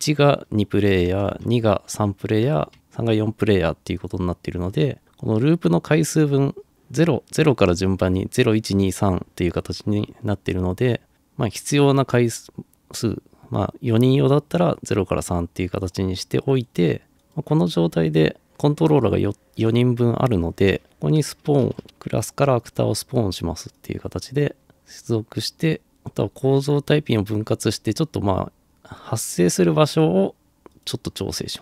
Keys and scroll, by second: 1.1 2, 1.4 Return, 2.5 3, 2.8 Return, 21.0-22.4 typing.